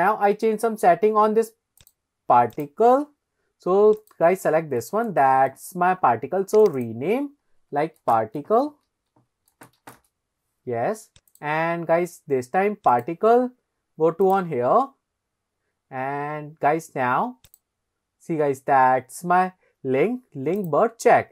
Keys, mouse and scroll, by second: 0.6 scroll up 1, 1.8 click, 2.5 click, 4.0 click, 4.5-5.1 scroll down 2, 5.2 shift+middle click, 6.6 click, 6.8 click, 8.0-10.0 drag, 11.3 click, 12.9 click, 14.3 click, 17.5 click, 20.6 click, 21.1-21.3 scroll down 2.